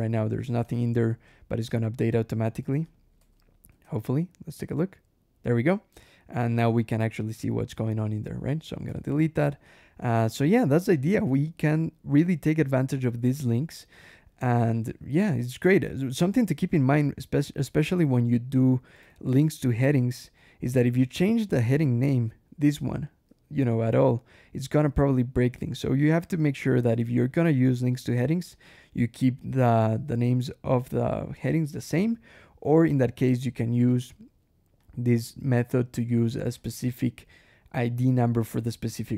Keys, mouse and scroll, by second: 0.0-0.8 typing, 2.7 click, 3.0 Escape, 3.2 j, 3.5 o, 3.7 Escape, 7.7 click, 8.0 Escape, 8.3 d, 8.7 Escape, 9.5 click, 10.8 click, 11.3 ctrl+w, 14.7 click, 18.9 ctrl+e, 19.8 click, 21.1 alt+Return, 22.0 click, 22.5 click, 23.3 h, 26.7 alt+h, 28.4 alt+l, 29.5 click, 30.9 click, 32.7 alt+h, 33.8 click, 34.6 click, 35.6 shift+click, 36.4 shift+click.